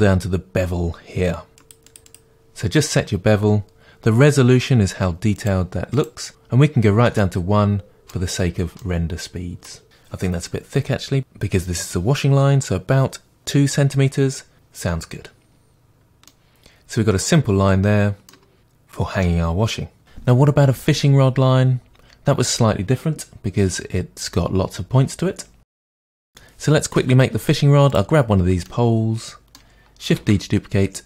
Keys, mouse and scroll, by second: 7.2-11.2 middle drag, 8.4-8.8 scroll up 2, 11.2-16.3 drag, 16.3-25.6 middle drag, 25.6 ctrl+z, 25.7-27.9 middle drag, 27.9 click, 28.6-31.0 middle drag, 30.2 shift+d.